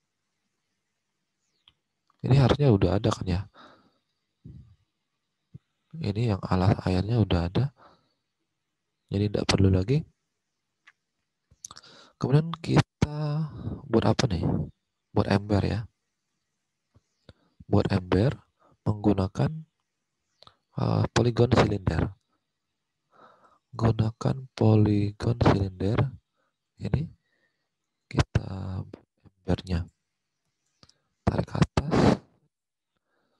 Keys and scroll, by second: 2.7 alt+Tab, 7.5 alt+Tab, 21.7 alt+Tab, 33.2 alt+Tab.